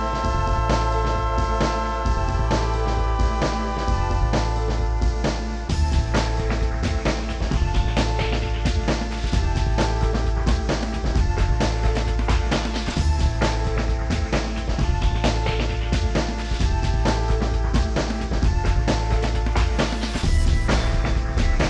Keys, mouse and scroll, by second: 0.6 scroll down 4, 0.8 scroll up 12, 1.0 m, 1.4 scroll up 1, 1.7 shift+click, 1.7 shift+middle click, 1.8 scroll down 17, 2.1 scroll up 2, 2.5 ctrl+c, 2.7 ctrl+click, 2.7 ctrl+x, 2.8 ctrl+z, 2.9 ctrl+z, 3.1 ctrl+z, 3.2 Escape, 3.6 double click, 4.0 middle click, 4.2 scroll down 10, 4.3-4.9 scroll up 15, 4.7 middle click, 5.1 shift+click, 5.2 shift+middle click, 5.3 scroll down 1, 5.5 scroll up 12, 5.7 middle click, 5.8 middle click, 6.0-8.6 typing, 6.7 middle click, 6.9 scroll up 6, 7.0 middle click, 7.0 scroll down 6, 8.2 shift+scroll down 1, 8.3 scroll up 6, 10.1 scroll down 28, 10.3 scroll up 7, 10.4-14.1 typing, 10.6 ctrl+click, 11.2 shift+middle click, 11.4 shift+click, 11.5 scroll up 21, 12.6 Up, 13.1 middle click, 13.2-13.6 scroll down 20, 15.4 scroll down 1, 15.6 space, 15.7 scroll up 6, 15.7 middle click, 15.8 s, 16.3 scroll up 6, 17.7 middle click, 17.8 scroll down 4, 17.9 middle click, 18.2 y, 18.3 y, 18.4 scroll up 5, 18.6 y, 19.6 y, 19.7 middle click, 19.8-20.2 scroll down 6, 20.0 middle click, 20.2 shift+middle click, 20.5 scroll up 1, 20.6 ctrl+click, 20.9 space, 21.0-21.6 scroll up 34, 21.6 Up.